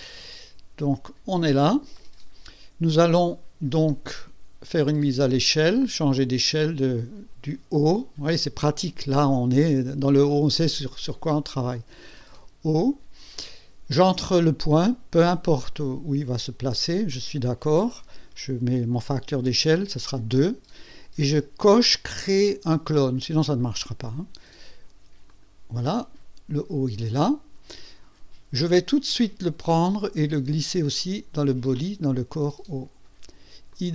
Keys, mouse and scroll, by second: 1.4 click, 12.2 click, 17.1 click, 17.6 click, 19.5 KP_2, 25.3 click, 26.1 scroll down 1, 26.5 scroll up 1, 29.7-31.9 drag, 33.7 click.